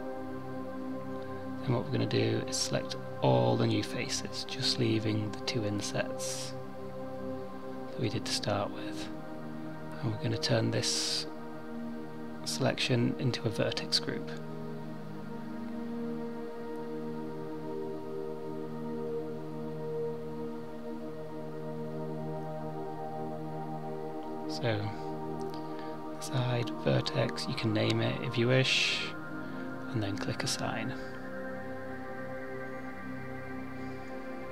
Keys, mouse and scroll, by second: 16.1 middle click, 18.2 click, 19.1 click, 21.4 click, 21.5 click, 25.4 click, 29.9 a, 30.1 a, 31.7 click, 34.2 middle click.